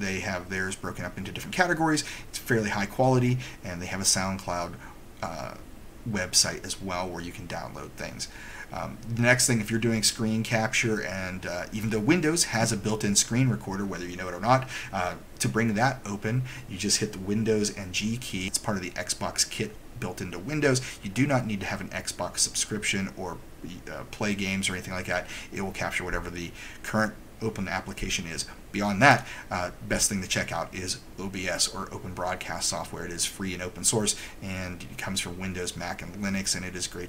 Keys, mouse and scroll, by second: 29.5 click.